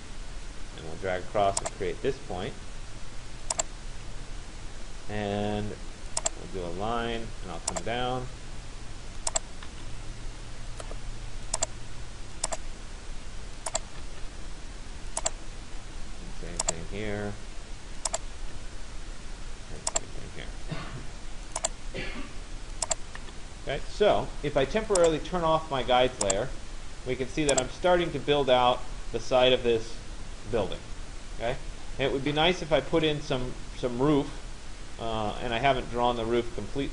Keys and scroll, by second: 3.5 Return, 9.3 Return, 13.6 Return.